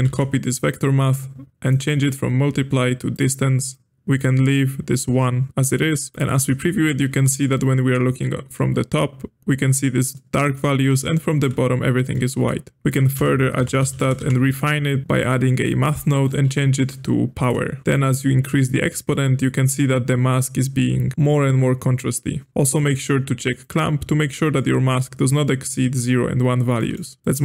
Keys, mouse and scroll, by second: 0.0 shift+d, 1.6-6.1 drag, 6.1-9.5 shift+middle drag, 10.1-12.9 middle drag, 12.9 click, 13.1 space, 15.6-16.2 middle drag, 16.2-21.1 drag, 22.5 click, 23.6 click, 24.3-27.2 middle drag, 27.2 g.